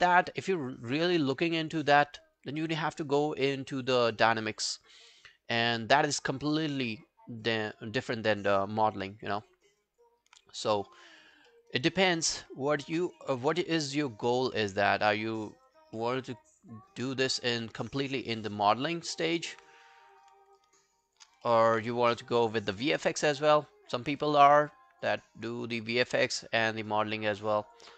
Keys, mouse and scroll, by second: 0.1 alt+middle click, 0.5 alt+scroll down 1, 0.7 alt+click, 1.3 alt+middle click, 1.6 alt+right click, 1.8 alt+click, 2.6 alt+middle click, 2.9 alt+right click, 3.1 alt+click, 4.0 alt+middle click, 4.3 alt+right click, 4.5 alt+click, 6.1 alt+middle click, 6.4 alt+right click, 7.1 alt+click, 7.7 alt+middle click, 8.1 alt+scroll down 1, 8.3 alt+click, 9.3 alt+middle click, 9.6 alt+scroll down 1, 9.8 alt+click, 10.8 scroll up 2, 11.5 alt+middle click, 11.7 alt+right click, 12.8 alt+click, 14.1 scroll down 1, 15.6 scroll down 2, 15.6 double click, 16.0 alt+middle click, 16.2 alt+right click, 16.4 alt+click, 17.1 alt+middle click, 17.4 alt+right click, 17.6 alt+click, 18.3 alt+click, 18.9 alt+middle click, 19.1 alt+right click, 19.3 alt+click, 19.7 right click, 21.1 shift+click, 21.5 alt+middle click, 22.5 alt+click, 23.3 shift+click, 23.6-25.4 shift+click, 26.2 shift+click, 26.3 shift+click, 27.7 shift+click.